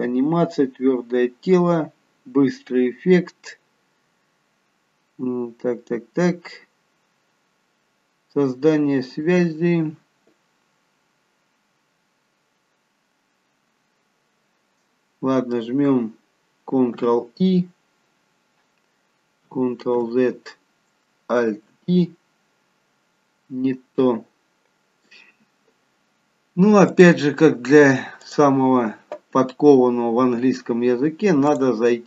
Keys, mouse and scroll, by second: 17.1 ctrl+i, 20.1 ctrl+z, 21.6 alt+i, 27.0 click.